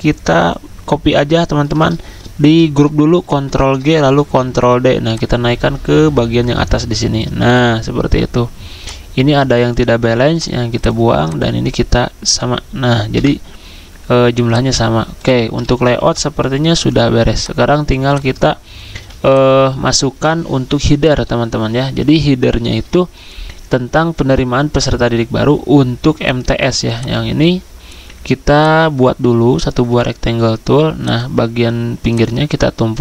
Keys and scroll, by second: 3.3 ctrl+g, 4.1 ctrl+d, 11.9 End, 13.2 Delete, 16.0 ctrl+g, 18.9 z.